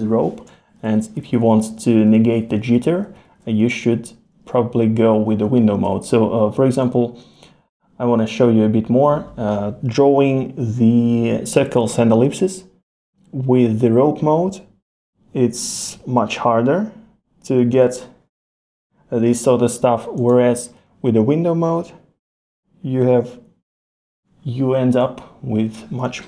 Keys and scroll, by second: 0.9 super+z, 5.4 super+z.